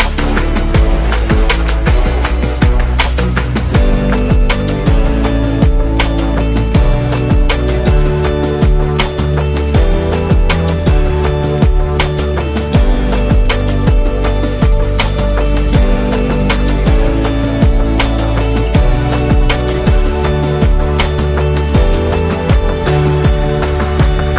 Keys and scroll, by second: 9.3 super+0, 12.4 super+g, 21.0 z.